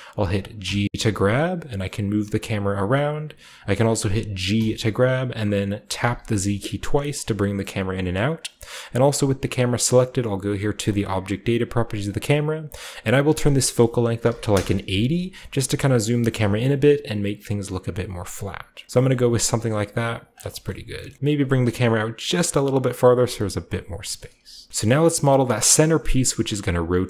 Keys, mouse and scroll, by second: 0.0-0.6 scroll up 1, 0.6-2.8 scroll up 1, 0.6 g, 3.5 click, 3.7-4.2 scroll down 1, 4.2 scroll up 1, 4.4 g, 5.9 z, 8.0 click, 10.9 click, 12.0 click, 13.1-16.0 drag, 14.1 8, 14.2 0, 14.4 Return, 16.0-16.4 typing, 18.0-20.6 drag, 18.1-19.3 typing, 19.0-20.1 middle drag, 20.4 shift+middle click, 21.0-22.9 shift+middle drag, 22.9 click, 23.1 middle click, 23.1 g, 23.7 drag, 23.8 shift+middle drag, 24.1 shift+middle click, 24.1-26.9 shift+scroll up 1, 26.9-27.0 scroll down 1.